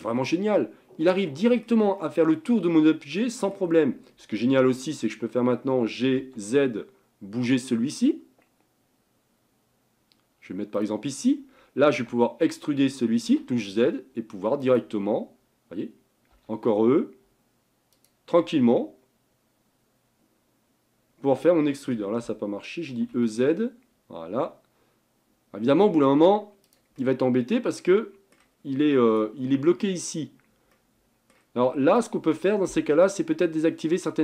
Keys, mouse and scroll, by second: 2.1-5.0 middle drag, 5.9 g, 12.0 e, 16.4 e, 18.7 e, 23.1 e, 27.0-30.1 middle drag, 30.7-32.0 middle drag, 32.0-34.2 drag.